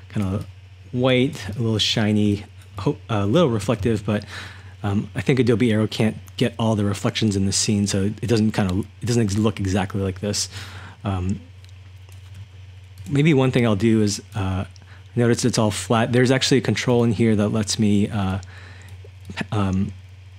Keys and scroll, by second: 0.0-4.5 typing, 10.5-12.4 typing, 13.5-14.7 typing.